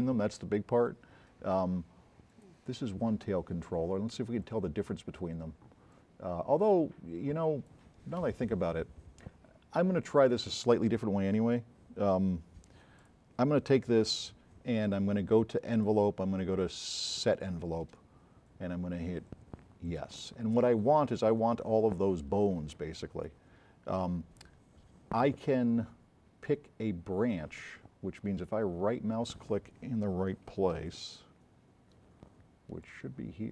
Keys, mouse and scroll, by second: 2.3 click, 4.5 click, 11.3-11.7 scroll up 4, 12.0 scroll down 1, 15.8 click, 19.9 click, 30.9 right click, 30.9 s, 32.7 right click.